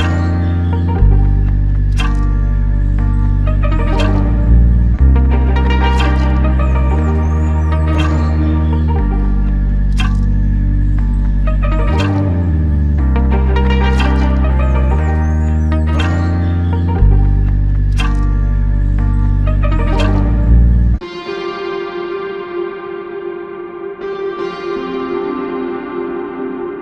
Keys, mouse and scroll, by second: 11.5 double click, 21.7 double click.